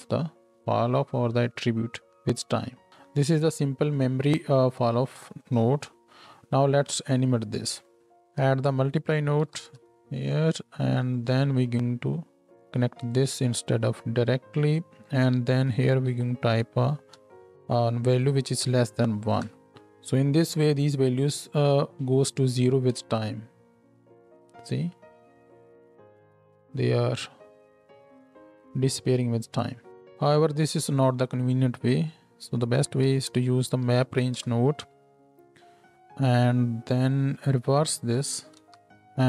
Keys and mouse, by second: 4.0-7.2 middle drag, 7.2-7.9 drag, 7.9-11.2 middle drag, 11.2-12.2 drag, 12.2-22.9 middle drag, 19.4 shift+Left, 22.9 space, 29.9 Down, 29.9-32.1 drag, 34.0 Down, 37.4 click.